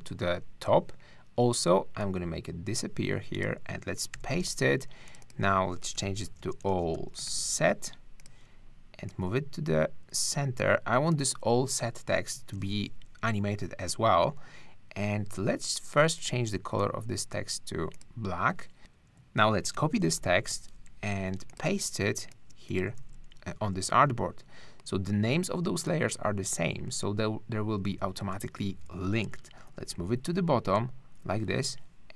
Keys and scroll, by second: 4.1 super+v, 5.7-7.8 typing, 12.5 super+c, 19.7 super+c, 20.2 super+-, 21.7 super+space, 23.0 super+v, 29.7 shift+Down, 31.2 shift+Up, 31.8 Up.